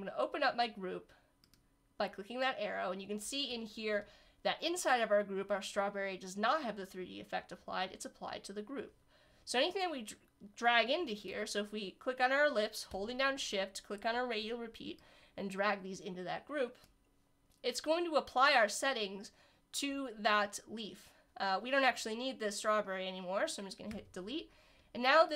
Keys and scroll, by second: 23.9 Delete.